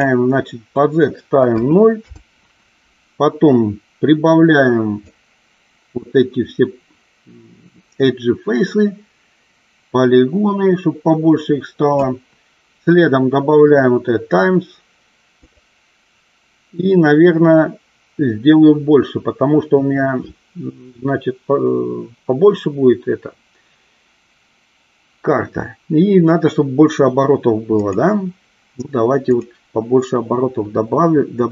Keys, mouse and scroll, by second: 0.0 click, 5.2 click, 15.5 click, 27.8 click, 29.5 click.